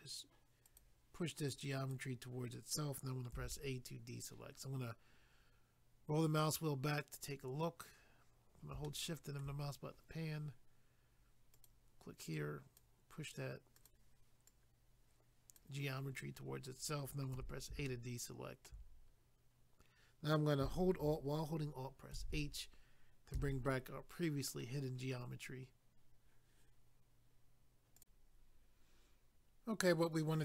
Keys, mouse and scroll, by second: 0.7 click, 0.8 click, 1.5 click, 3.3 a, 4.5 scroll down 1, 7.2 scroll up 1, 8.8 shift+middle click, 9.9 scroll up 1, 11.5 click, 13.8 click, 13.9 click, 14.5 click, 16.0 scroll down 1, 17.4 a, 17.9 shift+middle click, 22.1 alt+h, 23.3 a, 27.9 click, 28.0 click.